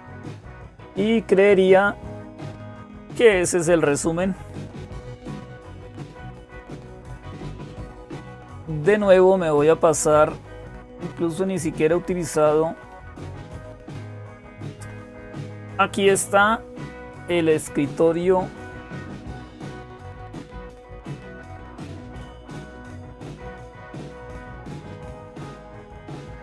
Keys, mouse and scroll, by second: 0.0-26.4 typing, 1.5-4.4 scroll down 2, 4.4-6.3 scroll down 2, 13.3 click, 19.5 click, 21.2 click, 22.4-23.5 drag, 24.8 click.